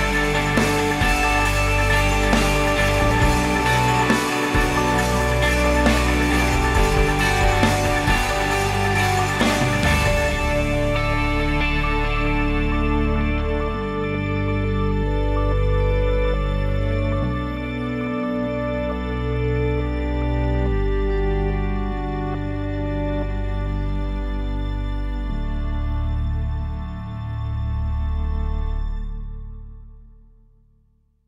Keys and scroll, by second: 15.8-17.0 typing, 18.4 Delete, 23.5 BackSpace, 29.0 ctrl+s.